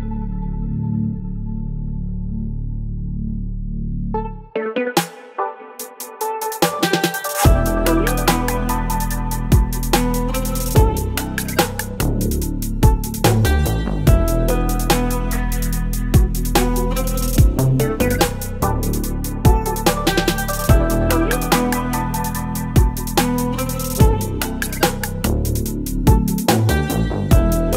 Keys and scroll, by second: 1.9 Return, 2.9 ctrl+j, 3.5 ctrl+t, 15.5 Return, 22.0 Delete, 25.1 Delete.